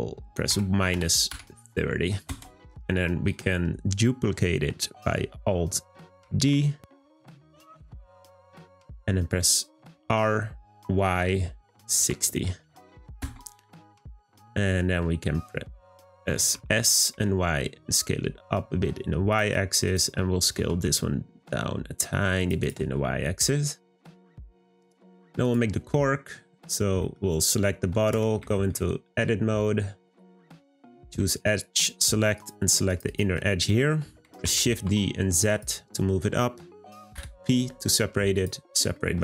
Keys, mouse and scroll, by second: 6.2 d, 6.8 d, 14.5-16.3 middle drag, 16.3 scroll up 1, 16.5 s, 19.8 click, 20.5 s, 22.6 click, 22.9-23.2 scroll down 2, 23.2-25.4 middle drag, 25.4 click, 26.1-27.5 shift+middle drag, 27.5-28.1 scroll up 3, 28.1 Tab, 28.5-30.0 shift+middle drag, 30.0 click, 30.9-32.3 shift+middle drag, 32.3 click, 32.9 alt+click, 33.0 alt+click, 34.4 shift+d, 37.1 p, 38.9 middle click.